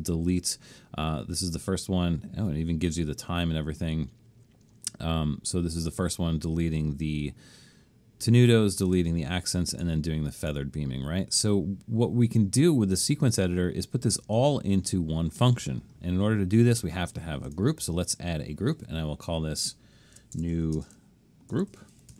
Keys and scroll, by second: 20.1-22.1 typing.